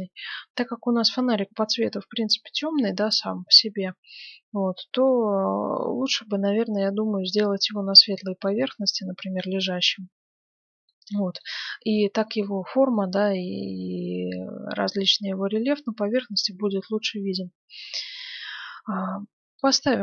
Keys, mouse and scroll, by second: 7.7-10.4 middle drag, 19.5-20.0 drag.